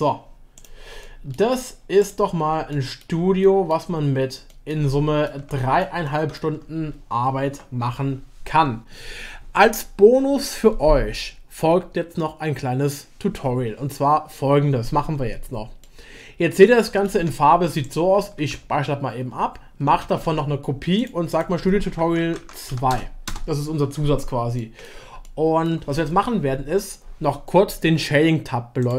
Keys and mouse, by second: 0.5 click, 1.1 middle click, 2.7 middle click, 3.4-3.7 shift+middle drag, 4.4 middle click, 4.9-5.2 shift+middle drag, 5.5 middle click, 6.0-6.4 shift+middle drag, 15.8-17.8 middle drag, 18.4 ctrl+s, 20.0 ctrl+shift+s, 24.6 click, 24.8 middle drag, 25.2-25.7 shift+drag, 25.7 shift+middle click.